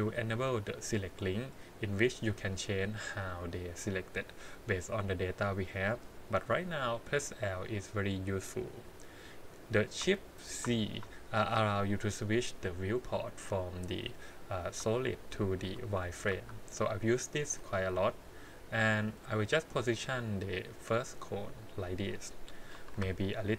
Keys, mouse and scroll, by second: 5.8 click, 10.5 shift+z, 10.5 shift+x, 15.1 shift+z, 15.6 shift+z, 16.0 shift+z, 16.3 shift+z, 17.4 g, 22.7 1, 23.2 alt+click.